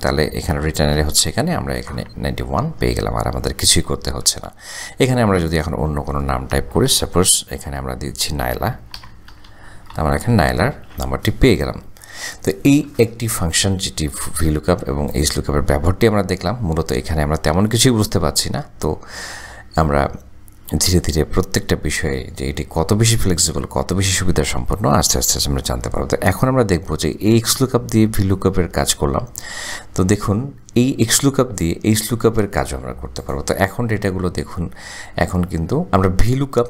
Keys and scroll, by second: 1.6 Return, 8.8-10.8 typing.